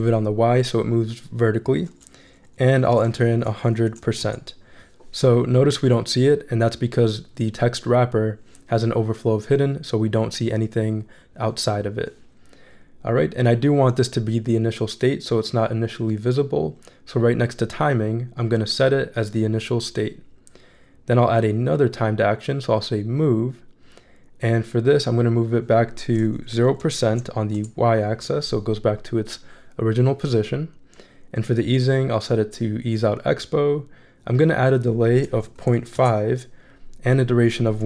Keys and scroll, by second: 2.7 1, 3.1 0, 3.9 shift+5, 4.2 shift+Return, 26.5 0, 27.0 shift+5, 27.5 shift+Return, 28.2 Return, 35.7 5, 35.9 Return.